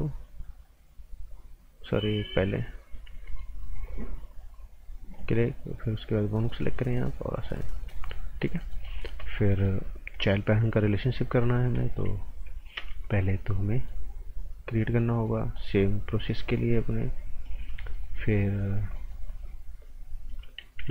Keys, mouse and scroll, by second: 3.1 alt+Num_Lock, 3.2 alt+right click, 5.1 click, 7.7 scroll down 1, 7.9 right click, 8.2 scroll down 1, 8.4 right click, 9.8 scroll up 1, 10.9 click, 11.1 right click, 12.7 a, 13.0 scroll up 1, 13.2 right click, 14.0 scroll up 1, 15.5 click, 17.8 right click, 18.3 scroll up 1, 18.6 scroll down 1, 18.9 right click, 19.3-19.6 scroll up 1, 20.7 b.